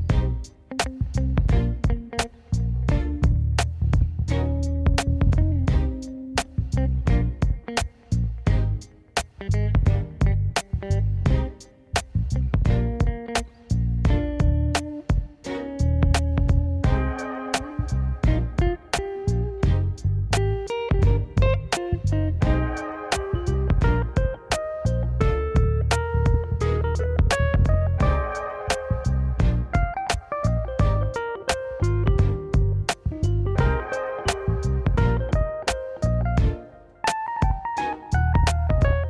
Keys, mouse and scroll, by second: 0.1-1.5 drag, 1.6 KP_0, 3.1 click, 3.7 click, 4.1 click, 11.8 shift+a, 14.3 g, 16.1-17.0 scroll down 2, 17.2 g, 19.2 s, 20.0-22.1 drag, 23.0 g, 24.8 g, 27.4 g, 30.5-31.4 scroll up 1, 33.9 click, 34.4 click, 35.6 click, 35.9 click.